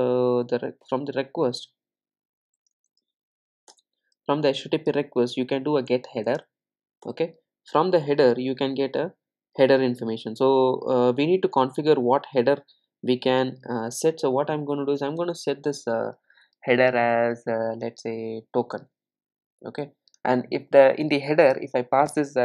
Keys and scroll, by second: 3.7 Return.